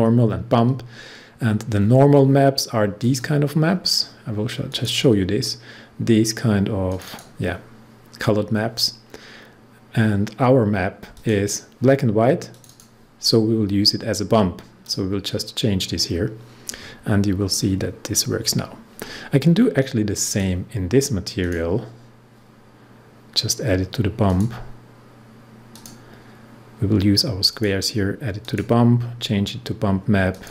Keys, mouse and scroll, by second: 3.0 click, 11.1 click, 17.8-18.1 scroll down 1, 18.5 scroll up 1, 20.2 click, 24.2 click, 27.4 click.